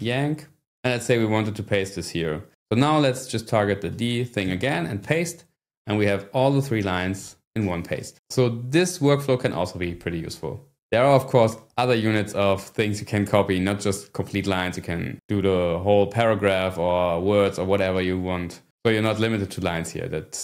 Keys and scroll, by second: 0.0-0.1 typing, 3.9 ", 4.4 d, 5.0 p, 6.5 scroll down 1, 6.6 Page_Down, 7.0 Page_Up, 7.1 Page_Up.